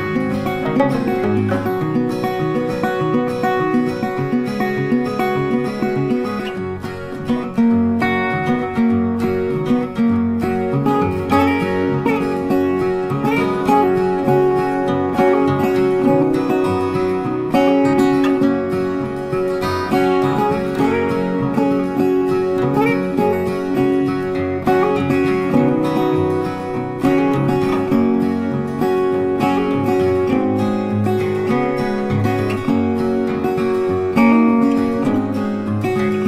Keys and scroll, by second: 31.7 ctrl+t.